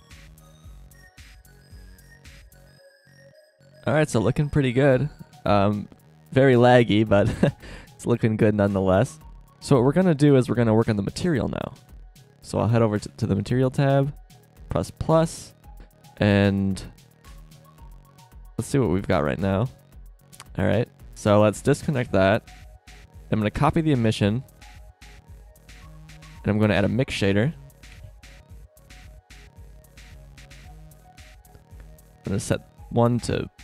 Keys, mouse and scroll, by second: 0.3 click, 8.7 click, 12.3-14.1 drag, 14.7-15.1 drag, 21.5 click, 22.0 Delete, 23.6 shift+d, 26.8 shift+a, 29.8 drag, 30.4-31.0 drag, 31.0 click.